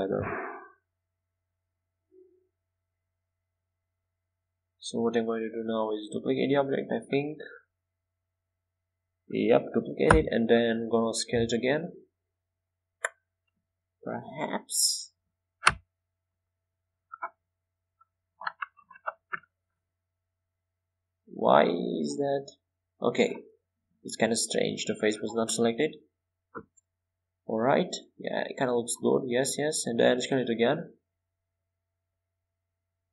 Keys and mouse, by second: 1.2 ctrl+z, 2.1 ctrl+z, 3.8 Tab, 5.5 z, 7.0-8.0 drag, 7.3 shift+d, 10.8-11.9 drag, 12.4 click, 12.4 right click, 14.6-17.2 right drag, 15.5 Tab, 19.8-21.9 middle drag, 21.9-23.7 right drag, 22.7-24.8 middle drag, 24.8-25.8 right drag, 25.4-26.5 middle drag, 27.6 middle click, 29.4 s.